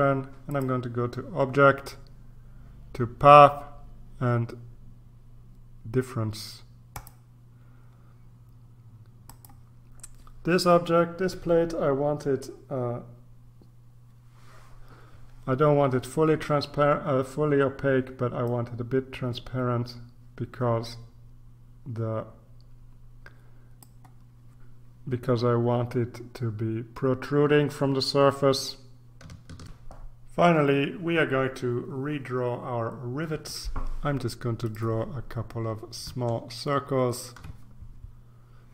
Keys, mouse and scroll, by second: 0.5 click, 6.9 click, 9.2 click, 18.5 click, 29.6 ctrl+r, 34.6 click, 36.7-37.5 ctrl+scroll up 2.